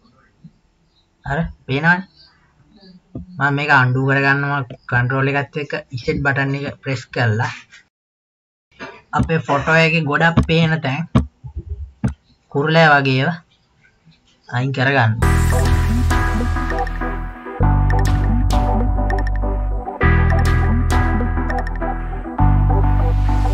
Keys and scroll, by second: 7.9 KP_1, 15.6 ctrl+z.